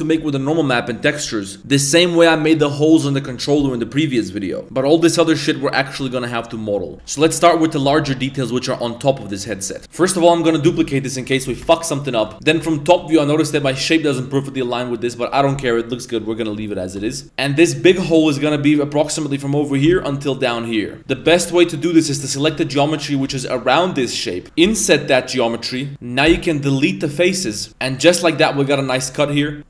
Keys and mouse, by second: 9.9 middle click, 10.6 shift+d, 11.2 g, 12.3 Tab, 12.3 z, 12.4 Tab, 12.7 shift+middle click, 13.0 z, 13.5 a, 16.8 shift+middle drag, 17.2 z, 18.3 3, 18.6 right click, 19.7 ctrl+shift+right click, 19.9 z, 21.0 z, 21.1 a, 21.2 a, 22.3 right click, 23.0 ctrl+shift+right click, 23.3 z, 24.4 z, 24.6 i, 25.9 z, 26.3 x, 27.5 Tab, 27.7 KP_3, 27.9 middle click, 28.5 middle drag, 28.9 Tab, 29.2 1, 29.6 KP_7, 29.6 z.